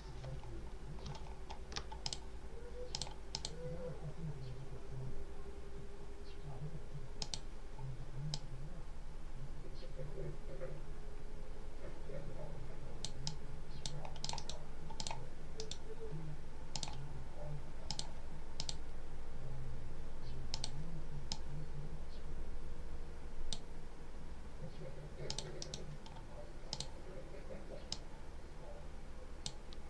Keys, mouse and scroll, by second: 1.1-1.6 ctrl+scroll down 2, 1.9 ctrl+click, 2.8 click, 3.2 click, 7.1 click, 8.2-13.9 drag, 14.1 click, 14.3 right click, 14.8 click, 15.4 right click, 16.6 click, 17.8 click, 18.4 click, 20.4 click, 21.2 click, 25.2 click, 26.6 click, 27.8 click.